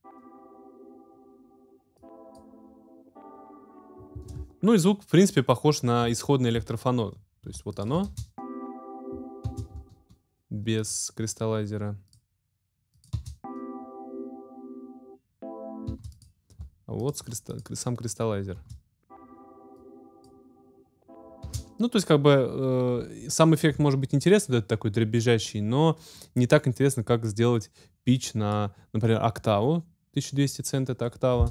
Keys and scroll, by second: 4.1 space, 8.0 alt+space, 9.0 space, 9.8 alt+space, 13.1 space, 15.9 space, 16.6 alt+space, 18.6 space, 21.4 space.